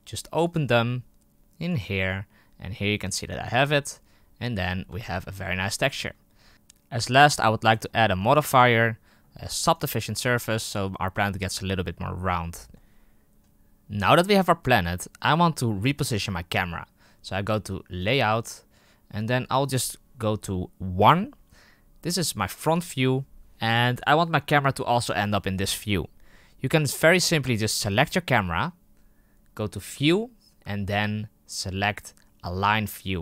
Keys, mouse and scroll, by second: 4.5-5.7 scroll up 10, 4.9-5.4 shift+middle drag, 5.7-6.3 shift+middle drag, 6.3-7.3 scroll up 1, 9.7-12.2 drag, 12.2-13.0 scroll down 6, 15.3-16.4 scroll down 3, 16.4 scroll down 1, 18.0 click, 18.7-20.9 middle drag, 20.9 KP_1, 27.8 right click.